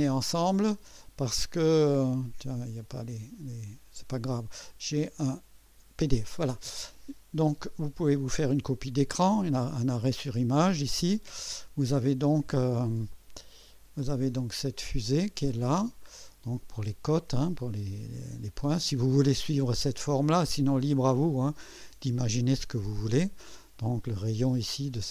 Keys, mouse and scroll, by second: 2.0 click, 3.6 click, 5.7 click, 13.1-16.2 middle drag, 13.1 scroll up 1, 13.2 scroll, 13.9 scroll.